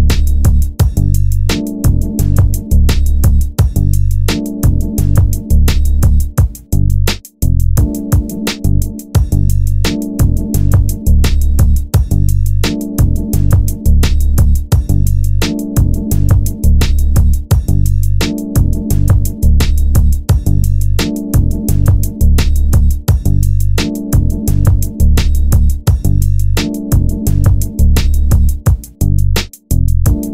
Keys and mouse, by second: 2.6 g, 5.2 g, 7.7 g, 8.4 click, 10.3 g, 11.8 click, 12.4 right click, 13.1 g, 13.7-14.8 middle drag, 16.5 middle click, 18.2 g, 28.5 shift+g.